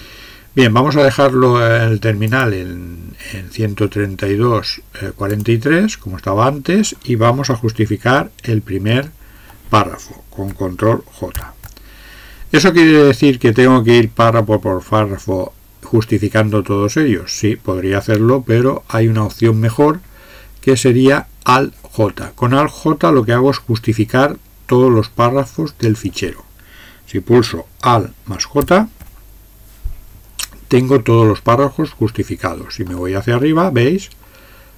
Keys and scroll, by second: 8.2-11.6 Up, 28.6 alt+j.